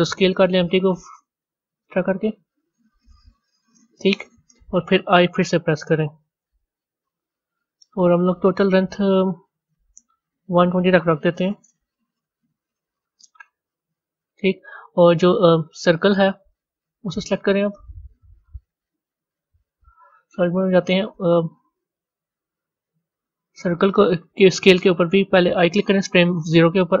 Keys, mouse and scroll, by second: 6.5 i, 15.8 click, 16.3 click, 19.1 z, 21.8-27.0 drag.